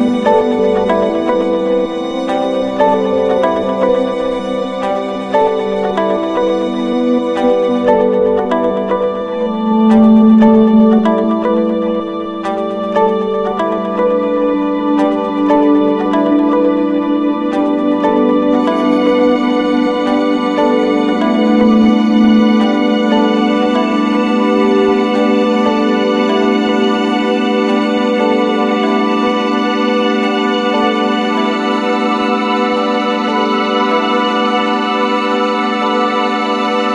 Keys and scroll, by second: 3.3 ctrl+-, 5.0 ctrl+=, 21.4 ctrl+-, 31.8 ctrl+-, 32.1 ctrl+0.